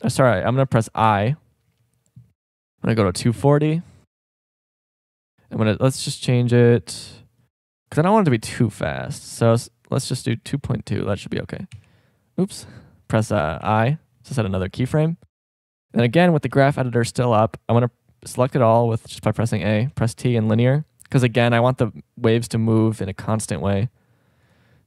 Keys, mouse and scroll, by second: 1.0 i, 13.6 i, 16.2 a, 16.5 a, 19.1 a, 19.4 a, 19.8 t, 24.4-24.8 drag.